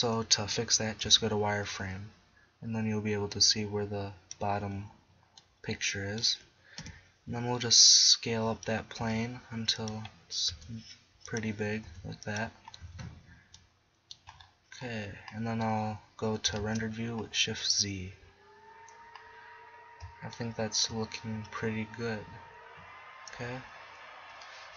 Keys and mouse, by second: 1.0 z, 6.8 KP_7, 7.3-8.4 middle drag, 9.0 s, 10.6 s, 12.0 s, 12.9 z, 16.8 shift+z, 23.5 KP_0.